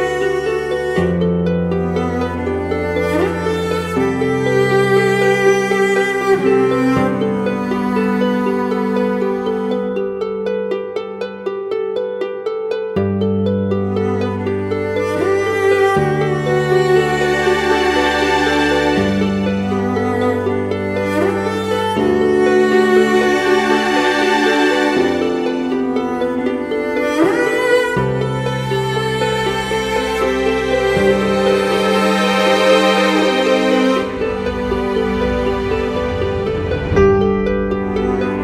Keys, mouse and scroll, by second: 1.2 Return, 2.0 Left, 3.0 Right, 3.8 Left, 4.6 ctrl+t, 5.6 alt+shift+click, 8.9 Up, 9.0 Up, 9.2 Up, 10.6 alt+shift+click, 12.7 Return, 13.3 Up, 13.6 Down, 13.7 Down, 13.8 Down, 14.0 Down, 14.4 Down, 15.7 Left, 15.9 Left, 16.1 Down, 16.6 Down, 17.1 Up, 17.6 Right, 17.9 Right, 18.1 Right, 18.3 Right, 18.5 Right, 18.7 Right, 31.6 double click, 33.9-35.7 typing.